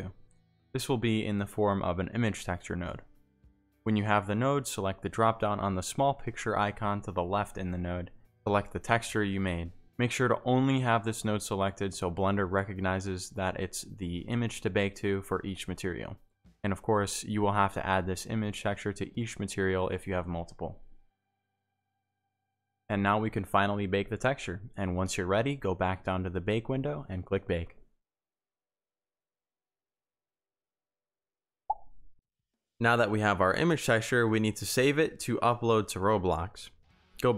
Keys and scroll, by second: 26.6 Pause, 31.2 Tab, 35.2 Tab.